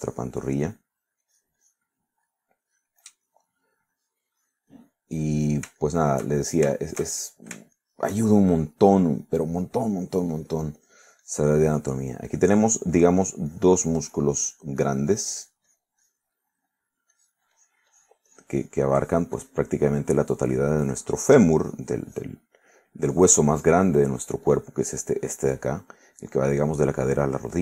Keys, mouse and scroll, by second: 1.8 middle click, 2.3 click, 3.1 middle click, 3.7 click, 4.3 middle click, 5.0 click, 5.7 click, 6.9 shift+middle click, 8.8 shift+middle click, 9.3 shift+middle click, 10.1 shift+middle click, 11.2 middle click, 11.8 click, 12.3 click, 15.3-17.4 drag, 17.5 middle click, 18.2-22.2 drag, 22.3 click, 23.1 click, 23.6 middle click, 24.2-25.9 drag.